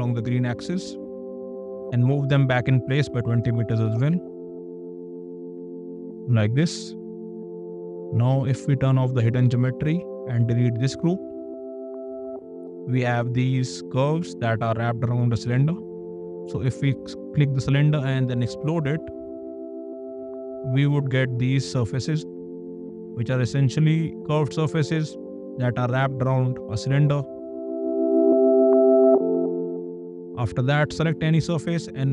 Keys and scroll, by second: 1.7 m, 3.0 KP_2, 3.3 KP_0, 4.0 Return, 5.8 space, 11.5 d.